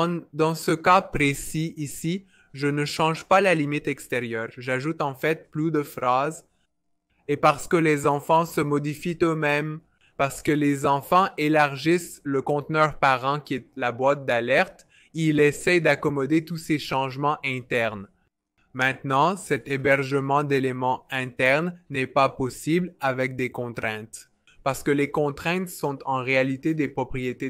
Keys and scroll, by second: 4.5 Return, 4.7 typing, 6.1-7.8 typing.